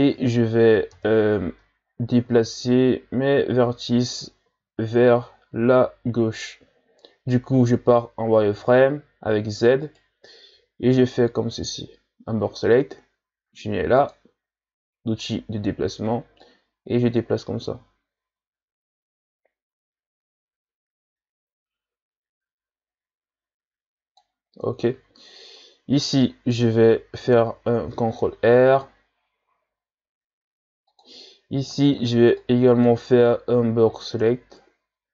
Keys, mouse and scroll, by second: 0.9 KP_1, 1.9-2.4 ctrl+scroll up 2, 3.0-3.7 scroll up 1, 4.5 z, 9.8 right click, 10.5 b, 14.0-19.5 drag, 24.8-27.9 shift+scroll down 2, 27.9 ctrl+r, 31.7 right click, 31.9 b, 34.2-35.1 drag.